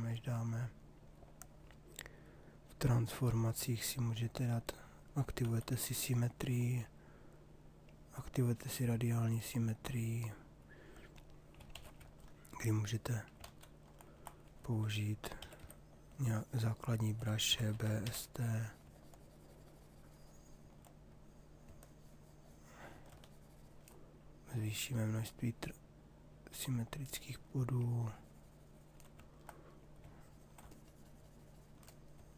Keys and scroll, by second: 5.0 x, 11.3 shift+f, 13.4 ctrl+z, 15.4 b, 15.7 h, 17.3-18.6 typing.